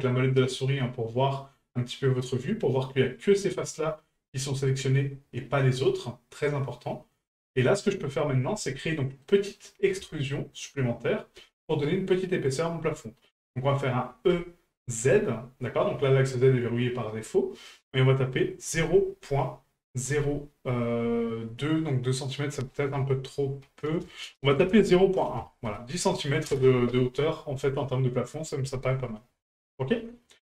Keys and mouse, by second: 0.1-8.2 middle drag, 8.7-9.2 middle drag, 10.2-10.5 shift+middle drag, 29.9-30.4 middle drag.